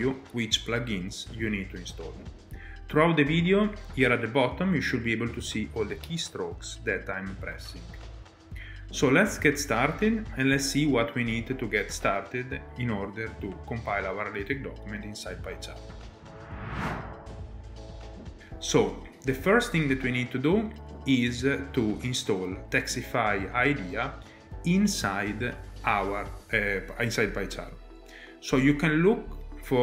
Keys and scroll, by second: 16.1 alt+Tab.